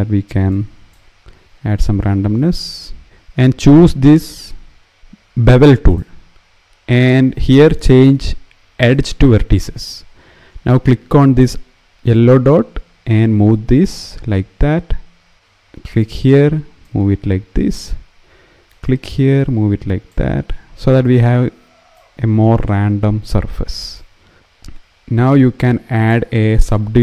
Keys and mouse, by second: 0.2 click, 1.2 ctrl+b, 1.2 ctrl+z, 5.6 click, 7.3-9.0 drag, 11.9 click, 15.6 click, 16.6-20.8 drag, 21.7-24.4 drag, 24.4 Tab, 24.5 Tab, 25.7 click, 26.4 click.